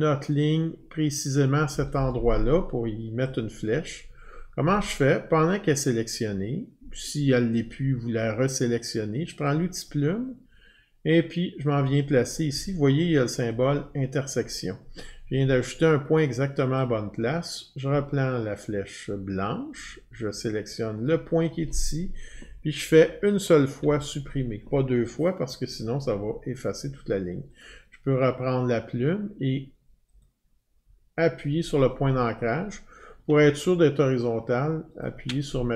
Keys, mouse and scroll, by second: 2.8-3.2 scroll, 9.4 click, 13.5 click, 16.7 click, 21.0 click, 23.8 Delete, 27.6 click, 30.2 click, 35.0 shift+click.